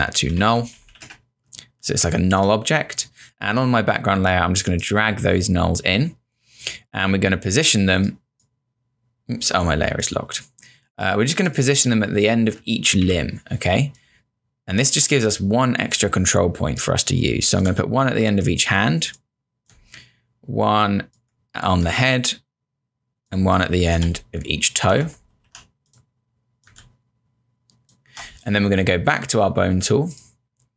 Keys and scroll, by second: 0.0-1.4 typing, 13.0 q, 25.3 ctrl+z.